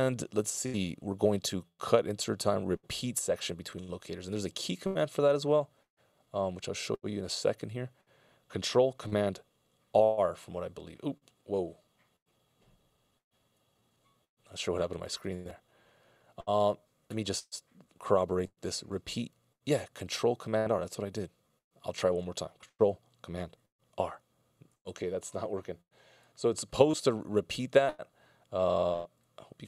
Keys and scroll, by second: 10.2 ctrl+super+r, 24.2 ctrl+super+r.